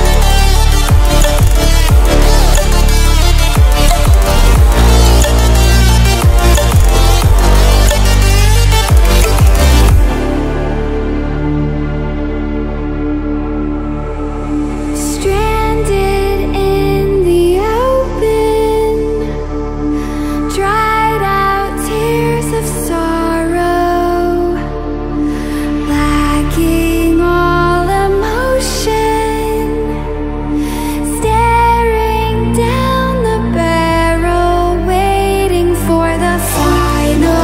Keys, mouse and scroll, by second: 1.8-9.9 drag, 15.8 click, 25.3-35.3 drag.